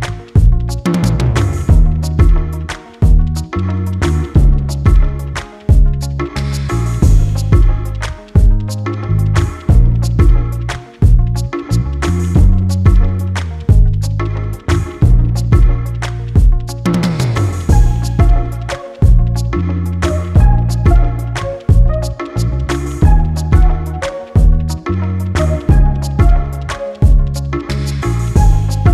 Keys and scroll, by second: 22.5 b.